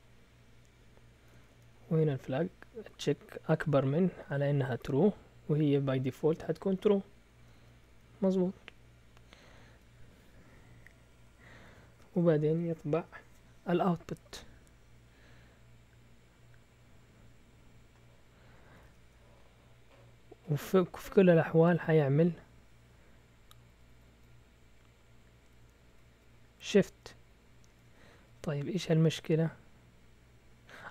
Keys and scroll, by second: 1.3-2.0 typing, 4.0-4.7 typing, 7.5 typing, 9.1-10.0 typing, 11.1-11.8 typing, 18.8 typing, 23.9 typing, 25.6-26.0 typing, 27.7-28.7 typing, 30.6 typing.